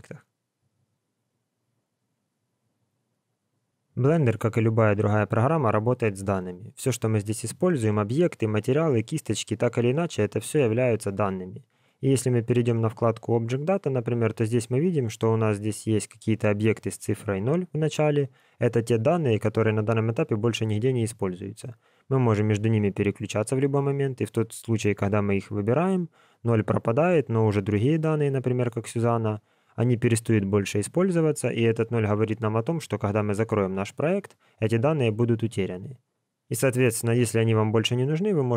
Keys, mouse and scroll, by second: 13.0 click, 14.1 click, 21.6 click, 23.5 click.